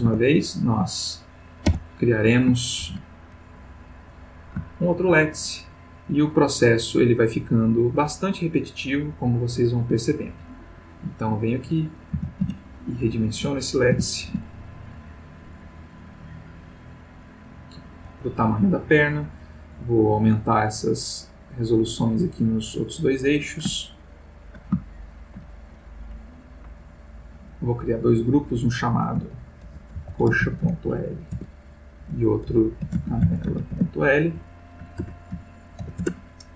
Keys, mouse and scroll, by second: 0.0 Tab, 0.4 click, 1.7 h, 2.8 shift+a, 4.0 click, 4.7-5.2 ctrl+middle drag, 7.0 click, 7.9 click, 10.3 g, 11.6 click, 12.2 s, 12.4 z, 13.1 click, 13.9 s, 14.3 x, 17.8 click, 20.1-21.7 drag, 22.0-23.5 drag, 23.8-24.7 ctrl+middle drag, 24.9-25.5 ctrl+shift+middle drag, 27.2 click, 28.1 click, 29.6-30.7 typing, 31.3 shift+Tab, 32.8-33.6 typing, 34.9 shift+BackSpace, 35.8 shift+l, 36.0 shift+Return.